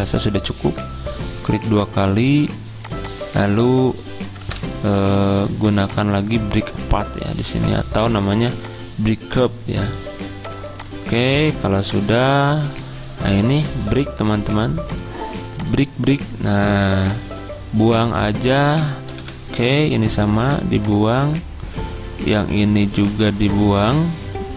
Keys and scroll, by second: 5.1 ctrl+z, 19.3 Delete.